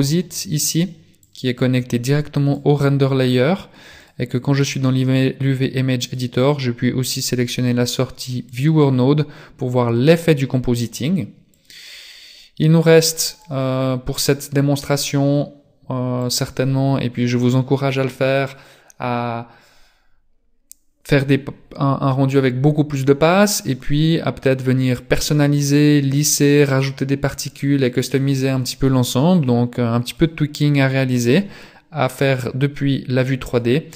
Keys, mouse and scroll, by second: 30.6 click.